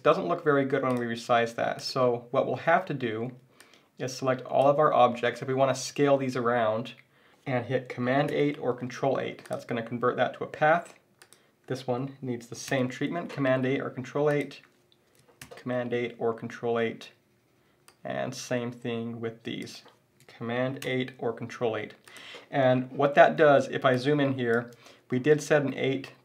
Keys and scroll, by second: 8.3 super+8, 12.7 super+8, 15.4 super+8, 20.8 super+8, 23.4 z.